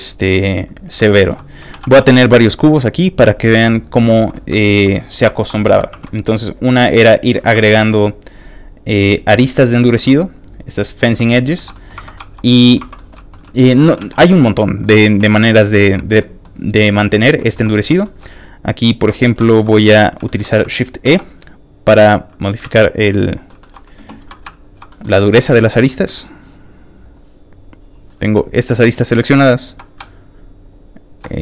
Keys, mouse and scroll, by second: 0.8 shift+click, 1.1 shift+middle click, 1.4 scroll down 1, 1.7 shift+d, 3.2 shift+click, 3.6 shift+middle click, 4.0 shift+middle click, 4.2 shift+middle click, 4.6 shift+middle click, 4.9 shift+middle click, 5.3 shift+middle click, 5.5 shift+middle click, 5.9 ctrl+r, 6.2 click, 7.2 click, 7.5 ctrl+r, 7.6 ctrl+click, 9.3 click, 9.6 middle click, 9.9 ctrl+r, 10.1 click, 11.0 click, 11.3 middle click, 11.5 middle click, 11.7 middle click, 11.9 Tab, 12.1 shift+middle click, 12.4 middle click, 12.8 shift+Tab, 12.9 middle click, 13.3 shift+middle click, 13.4 middle click, 13.5 shift+middle click, 14.0 alt+a, 14.2 middle click, 14.7 1, 14.9 alt+click, 15.3 click, 16.2-17.3 middle drag, 17.5 shift+middle click, 18.0 shift+middle click, 18.8 click, 19.1 middle click, 19.5 shift+click, 19.8 shift+middle click, 20.2 shift+middle click, 21.0 shift+e, 22.3 click, 22.3 e, 22.6 ctrl+z, 22.8 shift+middle click, 23.6 middle click, 24.2 middle click, 24.5 shift+click, 24.9 shift+middle click, 25.4 shift+middle click, 26.2 shift+click, 27.0 shift+click, 27.8 shift+click, 28.7 shift+click, 29.7 click, 30.6 shift+click.